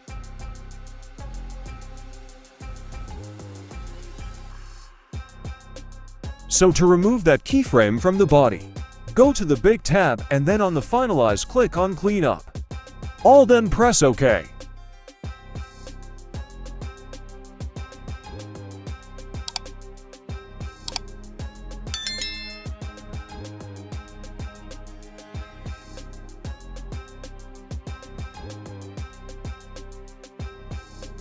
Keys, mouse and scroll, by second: 0.3 alt+g, 0.6 alt+r, 1.3 middle click, 1.3 scroll up 1, 2.1 click, 2.8 middle click, 4.1 right click, 5.6 scroll up 1, 5.9 middle click, 7.4 click, 8.9-9.8 middle drag, 10.9 click, 12.9-16.9 drag, 17.7 click, 18.4 click, 18.4 right click, 19.4-19.8 drag, 19.8 right click, 19.8 g, 20.1 click, 20.1 right click, 20.5 g, 22.2 click, 22.2 right click, 22.6 g, 24.4 click, 24.4 right click, 24.9 click, 24.9 right click, 25.2 g, 26.8 click, 26.8 right click, 27.1 click, 27.1 right click, 27.8 click, 27.8 right click, 28.3 click, 28.3 right click, 28.7 g, 30.5 click, 30.5 right click, 30.9 g.